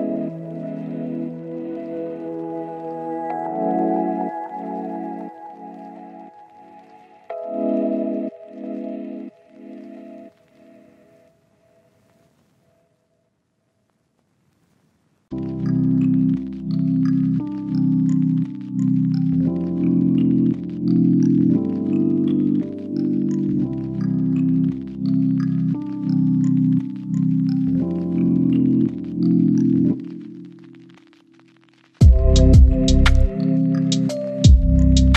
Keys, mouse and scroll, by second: 1.2 scroll up 1, 1.3 right click, 1.5 click, 3.5 right click, 4.1 click, 4.2 right click, 4.7 click, 5.4 right click, 6.0 click, 6.1 right click, 6.6 click, 7.2 right click, 7.5 scroll up 1, 7.6 click, 8.9 scroll down 1, 9.0 scroll up 1, 9.1 right click, 9.5 click, 9.7 right click, 10.6 scroll down 1, 10.7-11.6 scroll up 1, 11.6 click, 15.7 right click, 15.9 scroll down 1, 16.0-16.7 scroll up 1, 16.7 click, 16.8 right click, 17.6 click, 17.8 right click, 18.6 click, 18.7 right click, 20.2 scroll down 1, 20.4 scroll up 1, 20.5 right click, 20.7 scroll down 1, 20.9 right click, 22.3 click, 22.5 scroll down 1, 22.7-23.2 scroll up 1, 23.5-26.0 drag, 26.0 scroll down 1, 26.1-26.5 scroll up 1, 26.5 click, 27.5-27.8 scroll down 1, 27.8-28.2 scroll up 1, 28.5 click, 28.7 right click, 28.9 scroll down 1, 29.1 right click, 30.0-30.7 scroll up 2, 30.2 right click, 30.7 click, 31.0-32.7 scroll up 1, 32.7 click, 32.9 scroll down 1, 33.1-34.6 right drag, 34.6 scroll up 1, 34.8 click.